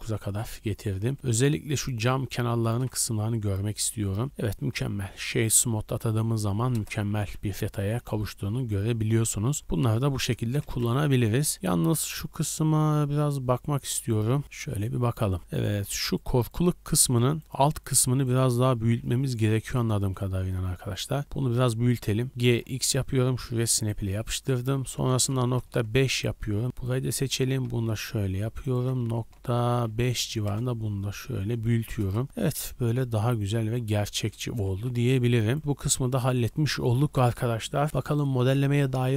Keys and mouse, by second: 2.6 shift+b, 4.6 w, 6.7 KP_0, 7.1 a, 7.3 a, 8.0-15.6 shift+drag, 10.6 shift+b, 15.6 middle click, 15.7-17.0 drag, 15.8 Tab, 19.2 3, 19.3 click, 19.3 middle click, 19.3 right click, 20.0 click, 20.0 middle click, 20.0 right click, 22.3 g, 23.7-31.5 ctrl+drag, 24.8 g, 27.4 g, 29.0 g, 32.0 click, 32.0 KP_0, 32.2-34.3 middle drag, 34.3 Tab, 34.6 a, 34.8 middle click, 34.8 a, 35.1-39.1 shift+drag.